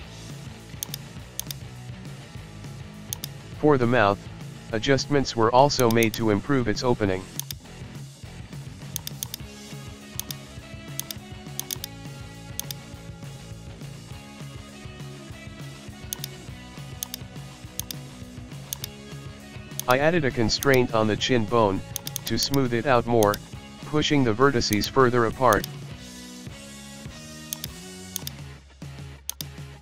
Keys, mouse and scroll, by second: 0.1-0.9 scroll up 1, 0.9 right click, 1.4-2.9 drag, 3.2 right click, 4.8-5.8 middle drag, 5.8-7.3 drag, 9.0-10.2 drag, 11.0 right click, 11.6-12.6 drag, 14.0-14.4 scroll down 1, 14.4-15.3 shift+middle drag, 15.3-16.2 scroll up 1, 16.2 right click, 16.6 g, 17.9 shift+right click, 18.7-20.2 drag, 20.7 right click, 22.0 click, 22.2 click, 22.4 click, 23.2-24.7 drag, 24.8 right click, 25.5-27.1 drag, 27.6 right click, 28.2-29.4 drag, 29.4 right click.